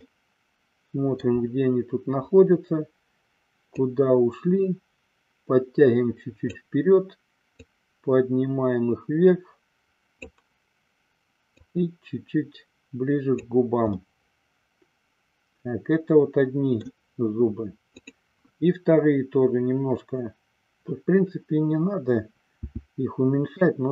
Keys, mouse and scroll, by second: 0.3-1.4 middle drag, 3.9-6.7 drag, 7.7-10.3 drag, 11.8-13.6 drag, 14.1-17.1 middle drag, 18.1 click, 22.6 s.